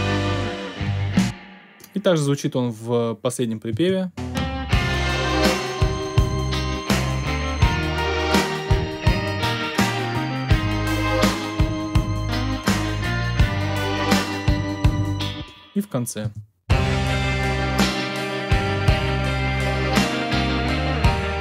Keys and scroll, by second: 0.8 space, 3.7 space, 14.9 space, 16.2 space.